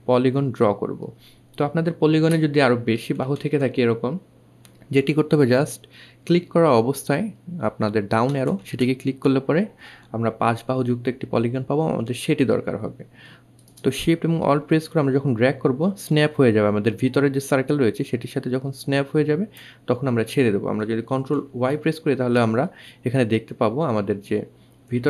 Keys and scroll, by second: 1.9 Up, 2.1 Up, 2.3 Up, 7.3 Down, 7.5 Down, 8.0 Down, 20.1 ctrl+alt+shift+y.